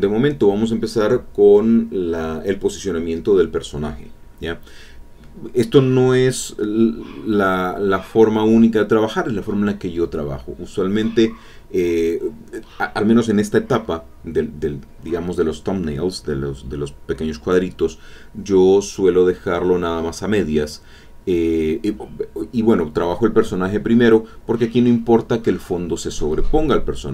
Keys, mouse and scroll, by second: 3.1-4.1 drag, 4.3 click, 5.7 click, 6.2 click, 7.7 click, 7.9-10.1 drag, 10.5-11.6 drag, 11.8-13.1 drag, 13.4 e, 13.5-14.7 drag, 14.5 e, 14.8-17.3 drag, 17.8 click, 18.4 click, 19.2-23.7 drag, 23.9-25.6 drag, 25.7-27.1 drag.